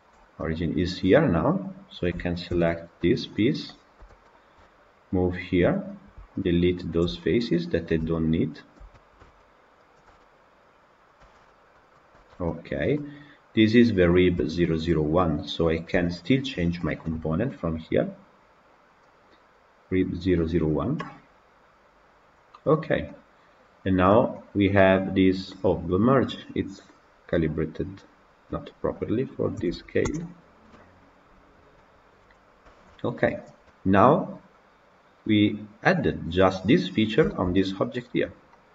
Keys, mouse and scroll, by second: 0.3-1.5 middle drag, 1.5 click, 2.4 ctrl+l, 3.8 g, 5.9 click, 6.3 shift+click, 6.8 shift+click, 7.1-8.1 middle drag, 8.1 shift+click, 8.5 shift+click, 8.8 middle click, 9.3 shift+click, 9.8 shift+click, 10.1-11.7 middle drag, 11.7 x, 12.0 Tab, 12.3-12.7 middle drag, 12.7-14.0 scroll down 3, 14.0 scroll down 3, 14.2-15.2 shift+middle drag, 15.2 click, 15.8 KP_Decimal, 21.6-22.6 drag, 22.9-23.8 middle drag, 23.8-24.2 scroll up 2, 24.2-24.8 middle drag, 24.8 scroll up 2, 31.2 KP_0, 31.6-33.3 middle drag, 33.3 click, 33.5-35.8 middle drag, 35.8 scroll up 1, 36.1 scroll down 1, 36.3 middle click, 36.8-37.1 scroll down 3, 37.1 shift+middle click, 38.0-38.4 scroll up 3, 38.4-38.7 middle drag.